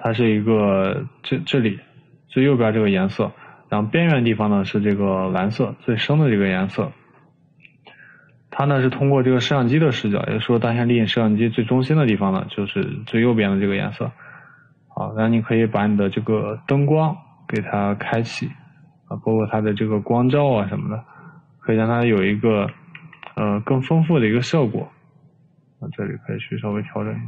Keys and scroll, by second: 23.3 e.